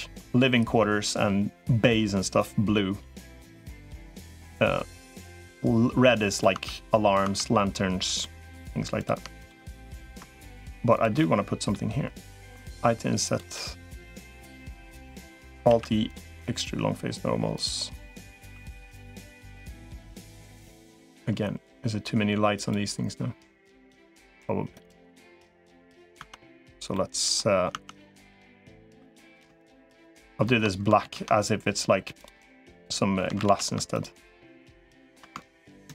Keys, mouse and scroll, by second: 4.6-6.2 middle drag, 6.4 Tab, 7.0 Tab, 8.0 middle click, 9.2 shift+click, 9.4 middle click, 11.0 middle click, 12.4 i, 13.3 middle click, 15.6 alt+e, 18.2 a, 18.6 g, 20.2 g, 23.0 g, 25.2 g, 26.0 Tab, 26.7 middle click, 27.6 Tab, 28.2 middle click, 28.6 3, 29.4 shift+click, 30.0 shift+click, 30.8 ctrl+z, 32.0 click, 33.2 ctrl+z, 34.6 shift+click, 35.8 ctrl+KP_Add.